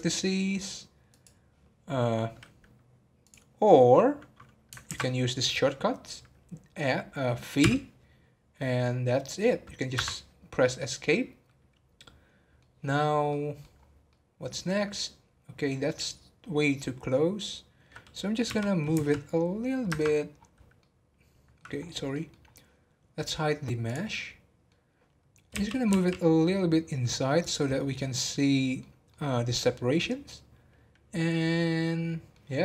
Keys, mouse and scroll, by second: 3.9 scroll up 1, 4.9 ctrl+z, 7.6 v, 11.0-13.7 middle drag, 13.7 scroll up 2, 14.1-17.2 middle drag, 20.3 scroll down 3, 20.7 middle click, 21.7-23.0 scroll up 7, 22.1 middle click, 23.0-23.8 scroll down 2, 23.8 click, 24.1-25.5 middle drag, 25.5 g, 27.7-32.6 middle drag.